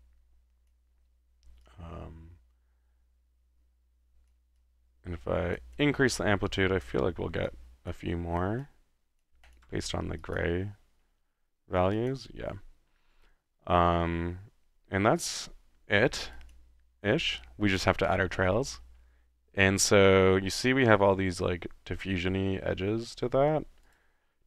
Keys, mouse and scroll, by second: 1.6-4.4 drag, 4.6-5.6 drag, 5.8-7.0 drag, 7.5-8.3 drag, 9.3 click, 9.7-10.2 drag, 9.7 1, 10.5 drag, 10.8-11.8 middle drag, 12.0-12.4 drag, 14.7-15.6 middle drag, 15.8-16.4 middle drag, 16.4 click, 18.7 middle click, 23.3-23.6 middle drag, 23.8-24.2 drag.